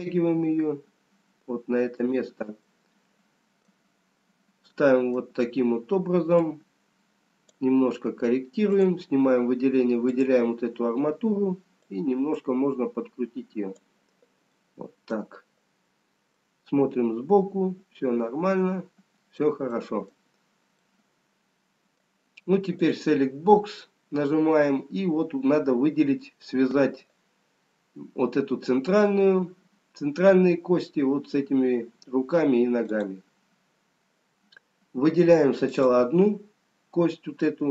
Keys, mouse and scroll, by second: 0.0 shift+d, 3.2 middle click, 4.3 scroll up 2, 7.5 click, 8.8 click, 11.8 click, 14.7 middle click, 17.5 scroll up 1, 20.4 scroll down 2, 22.0 middle click, 22.0-23.2 scroll down 1, 23.2 click, 24.3-25.9 scroll up 3, 33.3 click, 35.8 click.